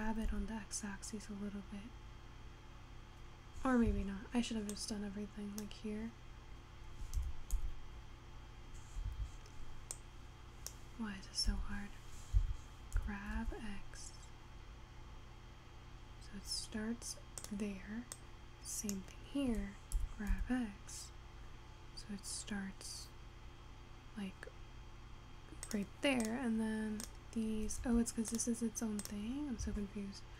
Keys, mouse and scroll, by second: 4.8 click, 7.2 g, 10.0 click, 11.5 s, 13.0 g, 18.2 click, 20.0 g, 26.3 click, 27.1 click, 27.9 Tab, 28.4 click, 29.1 click, 29.8 Tab.